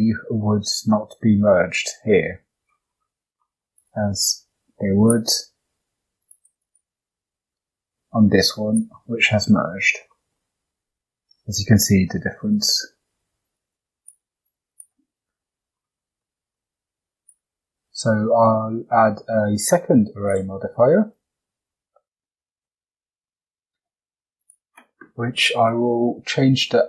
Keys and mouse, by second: 3.0 Tab, 3.4 middle drag, 3.8 click, 4.4 shift+d, 6.2 click, 6.3 click, 6.5 click, 6.6 click, 8.6 click, 9.2 Tab, 9.7 click, 10.1 middle click, 10.6 g, 13.2 Tab, 13.5 click, 13.8 x, 14.4 click, 14.5 x, 15.1 click, 16.2 middle click, 17.2-20.3 drag, 22.2 shift+middle drag, 22.6-23.2 middle drag, 24.4-26.8 drag.